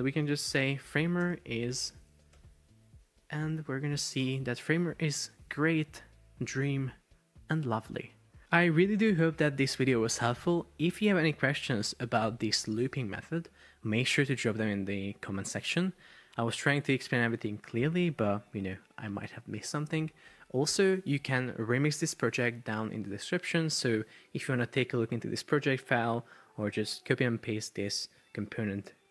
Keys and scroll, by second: 0.4-2.5 typing, 2.9 Escape, 3.5 super+p.